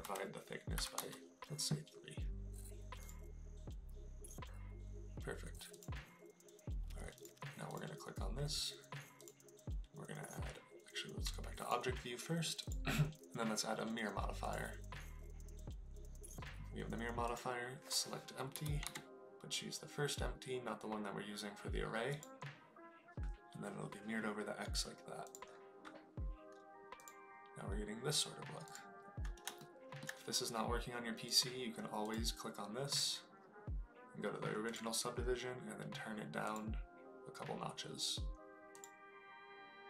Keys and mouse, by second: 2.9 click, 5.6 click, 7.1 click, 9.2-10.3 drag, 11.4 click, 12.5-15.3 drag, 17.2-22.4 drag, 25.7 click, 28.6 click, 29.5 shift+middle click, 32.0 click, 32.9 click, 34.6 click, 36.4 click.